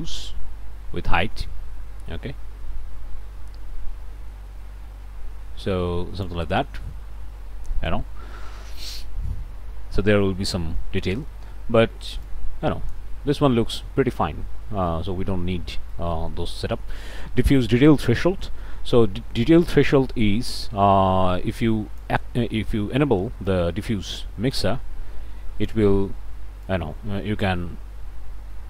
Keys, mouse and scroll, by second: 6.7 scroll down 1, 7.3-8.6 drag, 10.2 click, 14.5 middle click, 14.9 click, 15.2 middle click, 15.7 click, 19.4-28.6 drag.